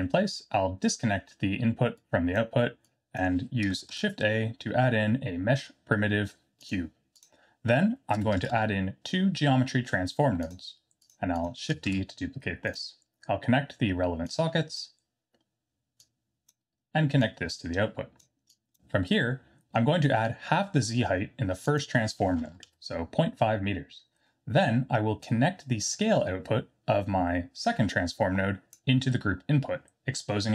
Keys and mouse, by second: 2.1 drag, 2.9 click, 3.9 shift+a, 8.4 shift+a, 11.8 shift+d, 14.3-14.8 drag, 16.0-16.5 drag, 17.2-18.2 drag, 18.6 click, 21.8-23.7 drag, 25.4-28.7 drag.